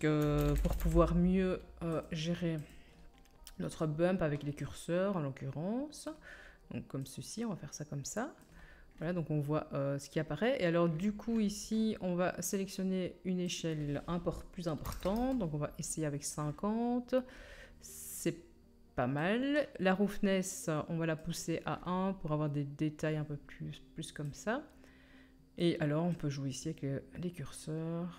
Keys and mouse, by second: 2.6-4.5 drag, 7.4-28.1 middle drag, 22.1-27.6 drag, 22.1-27.6 right drag.